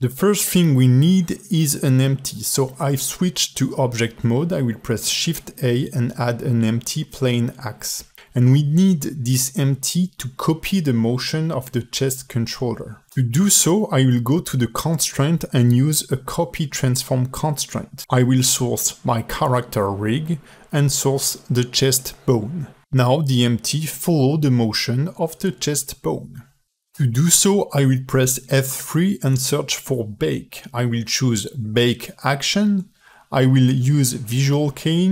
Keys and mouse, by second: 0.0 ctrl+Tab, 5.4 shift+a, 8.2 g, 14.2-16.8 drag, 20.9 ctrl+Tab, 21.5 ctrl+v, 24.0 space, 25.0 space, 29.4 space.